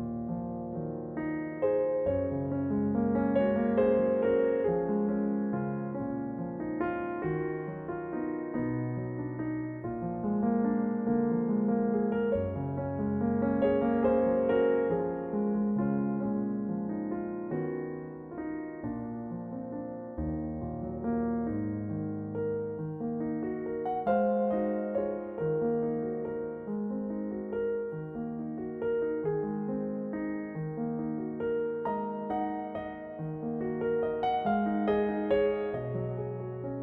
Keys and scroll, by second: 0.4 s, 6.0 s, 24.3 ctrl+z, 26.6 ctrl+z, 26.9 a.